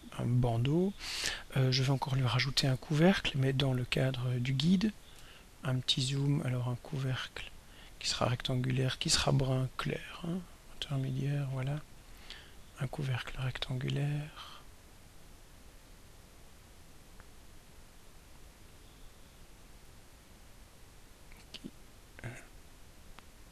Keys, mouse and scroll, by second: 0.1 click, 3.3 click, 5.6-6.3 ctrl+scroll up 4, 6.7-7.2 ctrl+scroll up 2, 10.4 click, 12.2 click, 14.8-18.2 drag, 19.8 click, 21.0-22.5 drag.